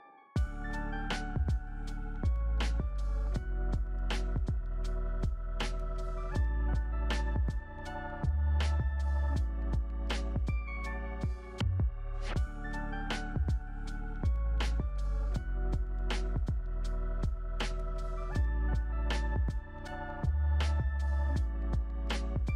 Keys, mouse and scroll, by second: 10.3 0, 10.4 Return, 11.4-14.9 typing, 15.4 Return, 16.9 2, 21.8 0, 21.9 Return.